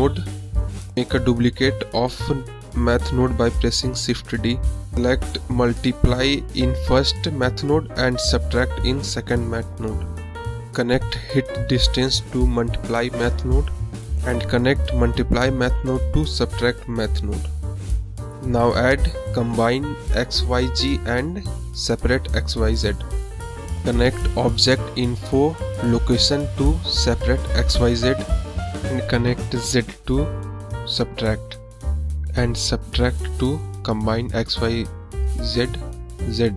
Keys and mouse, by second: 1.1 click, 2.2 click, 2.9 shift+d, 4.3-5.1 drag, 5.5-6.4 drag, 8.0-9.1 drag, 9.7-10.8 drag, 11.1 click, 11.8 shift+a, 16.4 shift+a, 19.5 click, 20.5-21.5 drag, 22.4 click, 24.6-25.7 drag, 26.2-27.7 drag, 29.4-30.6 drag, 31.1-32.0 drag, 32.7 click, 33.3 drag, 34.1 click.